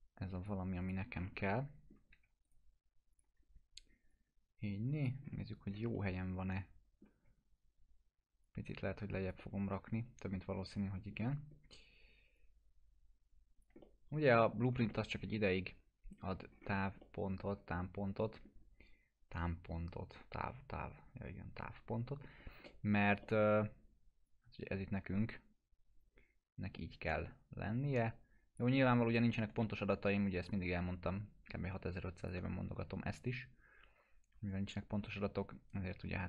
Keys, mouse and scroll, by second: 1.1 scroll down 1, 1.5-2.1 alt+middle click, 2.1 w, 2.4 right click, 3.1 click, 3.4 scroll up 1, 4.1-5.3 click, 5.2 scroll up 1, 5.9-7.2 alt+middle drag, 8.4-9.3 click, 9.4-11.2 alt+middle drag, 11.5 scroll up 1, 12.3-14.4 drag, 13.8 alt+middle click, 14.6 scroll down 1, 14.9 middle click, 15.2 scroll down 1, 16.5 scroll up 1, 17.0-17.6 alt+middle click, 17.7 scroll up 1, 18.2 alt+middle click, 22.4 scroll up 1, 22.6-23.7 alt+middle click, 23.6-24.2 scroll up 2, 24.2-27.7 drag, 28.8-29.7 alt+middle click, 30.4-32.3 drag, 32.4-36.2 alt+middle drag.